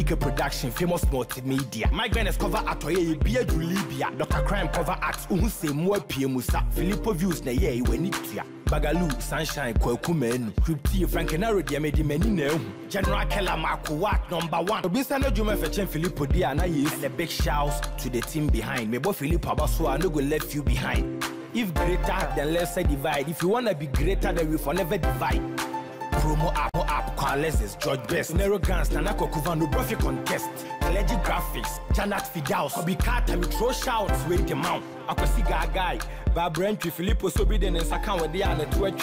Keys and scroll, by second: 23.5 ctrl+-, 35.2 ctrl+g.